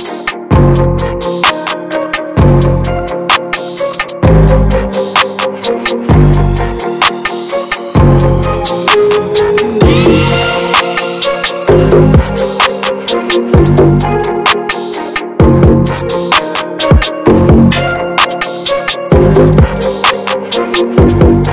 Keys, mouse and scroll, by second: 0.4 ctrl+z, 1.9-2.9 scroll down 1, 2.9-4.5 drag, 4.5 middle click, 5.0 ctrl+z, 6.4 middle click, 6.8 shift+f, 7.7-9.2 drag, 9.2-10.8 middle drag, 10.8 ctrl+z, 11.2-12.3 middle drag, 12.3 ctrl+scroll down 1, 13.6-18.2 drag, 19.5-20.8 shift+drag, 20.8 ctrl+scroll down 1.